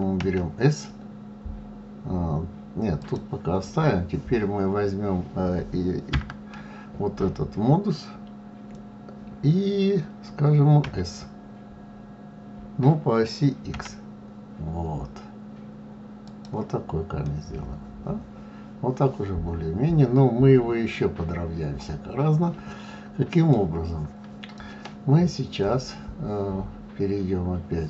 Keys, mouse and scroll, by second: 0.2 s, 6.1 Tab, 10.8 s, 17.2-20.2 middle drag.